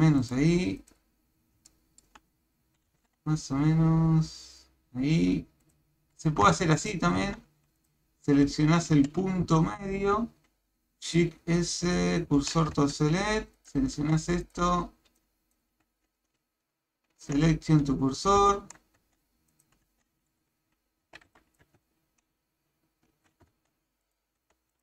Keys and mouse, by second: 0.8 click, 1.7 shift+middle click, 6.5 Tab, 6.8 click, 7.2 Tab, 8.9 a, 9.4 b, 10.5 shift+s, 12.8 Tab, 14.0 Tab, 15.2 click, 16.4 shift+s, 18.5 shift+middle click, 19.0 Tab, 19.5 click, 19.9 Tab, 21.1 a, 21.3 b, 21.9 shift+s, 23.5 Tab, 24.1 click, 24.4 Tab.